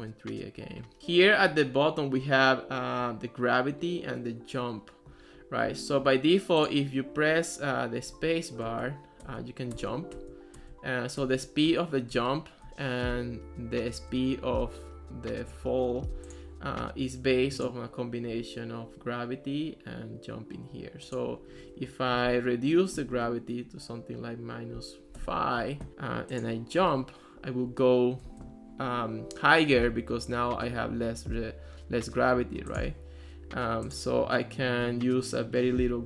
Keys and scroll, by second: 8.7 space, 22.7-23.7 typing, 25.2 Return, 26.9 space, 28.3 space, 32.9 space.